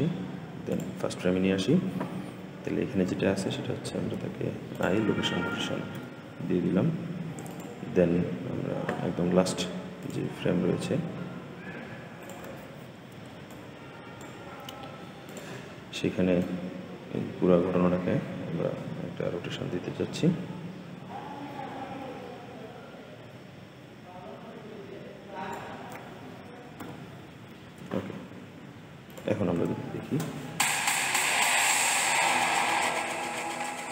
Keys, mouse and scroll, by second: 0.6-3.7 drag, 4.1 i, 5.8 n, 7.4 click, 9.9-19.3 drag, 26.7 i, 28.9 click, 29.4 space, 30.6 scroll up 3, 31.6 scroll up 1.